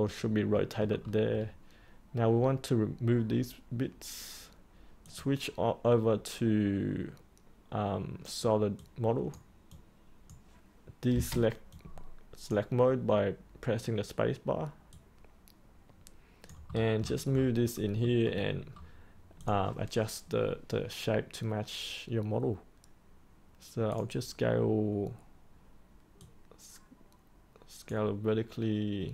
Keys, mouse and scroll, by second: 0.1-0.5 scroll up 1, 0.5 middle click, 1.0-5.0 scroll down 1, 5.0 click, 16.6-17.7 scroll up 1, 17.7 middle click, 18.1-18.6 scroll up 1, 18.6-19.3 scroll down 1, 19.3-29.1 drag.